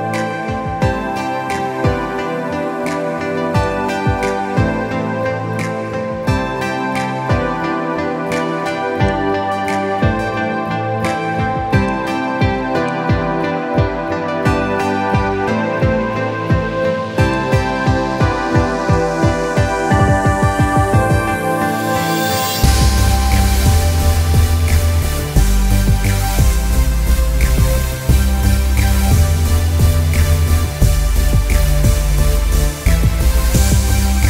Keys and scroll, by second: 0.9 ctrl+shift+i, 6.4 ctrl+0, 21.8 ctrl+t, 25.1 ctrl+-.